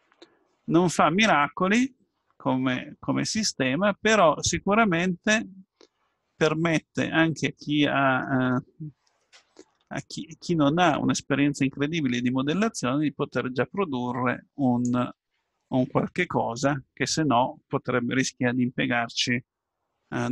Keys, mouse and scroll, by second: 2.8-4.1 middle drag, 4.2 middle click, 5.2-6.5 middle drag, 9.8-14.5 middle drag, 14.5 click.